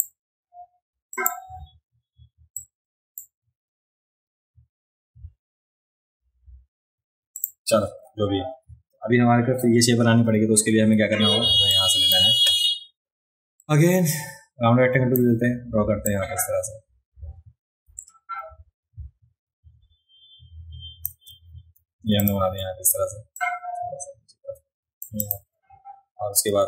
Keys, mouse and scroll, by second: 1.1 click, 2.6 click, 7.4 click, 8.6 v, 11.7 click, 13.6-15.1 drag, 16.1-21.1 drag, 22.1 v, 22.2 click, 23.4-25.0 drag, 25.2 click.